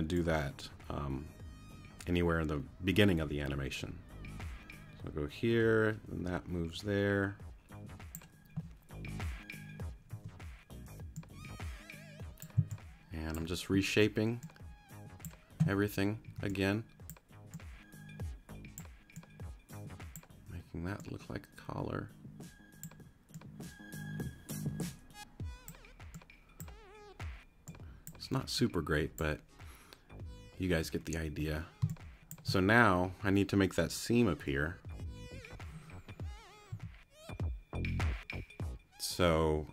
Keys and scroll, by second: 10.1 t, 12.6 c, 16.3 t, 31.8 space, 36.7 t.